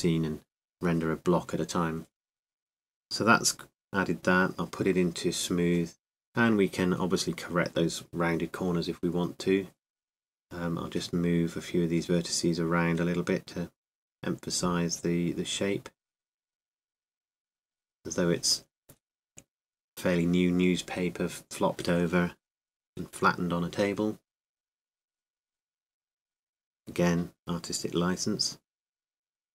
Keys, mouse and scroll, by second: 2.4-8.4 drag, 8.5-10.2 drag, 9.8 middle click, 11.2 Tab, 13.9-16.8 right drag, 16.8-19.1 middle drag, 19.1 click.